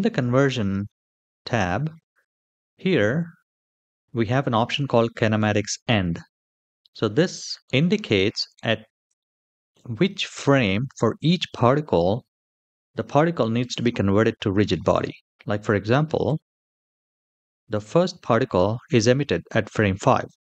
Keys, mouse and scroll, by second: 7.1 middle click, 8.3-8.9 scroll up 2, 9.1-9.5 shift+middle drag, 9.8 middle click, 15.8 Right, 16.0 Right, 16.4 Right, 16.7 Right.